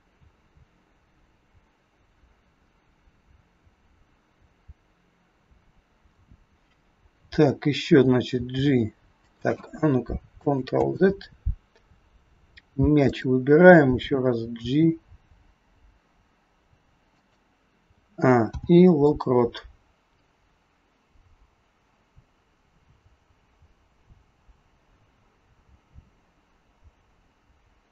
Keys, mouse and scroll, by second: 8.3 g, 10.7 ctrl+z, 13.1 click, 14.6 g, 17.8 a, 18.4 i, 20.2 click.